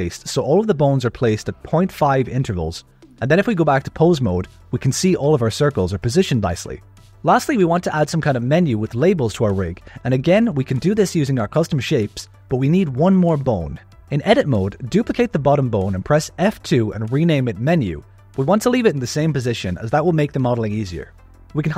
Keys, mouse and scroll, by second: 0.5 Tab, 1.8 click, 1.9 Tab, 2.2 a, 2.4 s, 5.4 Tab, 6.5 click, 7.3 click, 7.9 alt+a, 9.6 click, 10.3 alt+a, 11.1 click, 12.8 click, 13.9 click, 15.5 shift+d, 16.6 F2, 21.3 click.